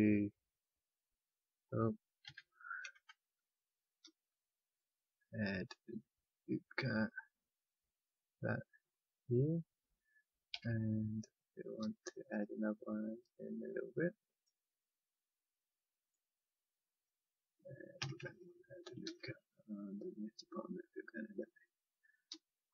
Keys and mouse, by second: 0.6-2.2 drag, 2.2 ctrl+z, 4.0 ctrl+r, 10.5 a, 11.7 ctrl+r, 17.9 a, 19.0 ctrl+r.